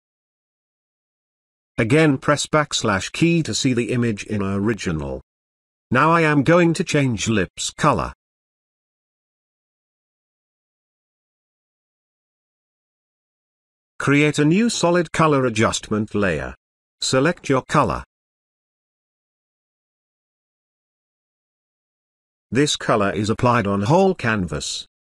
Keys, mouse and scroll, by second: 0.0 ctrl+drag, 2.3 space, 2.5-3.4 ctrl+drag, 6.3-7.0 ctrl+drag, 7.9-8.5 ctrl+drag, 14.5 click, 15.9 click, 18.9-21.8 typing, 22.9 click, 23.6 space, 24.1-25.0 ctrl+drag.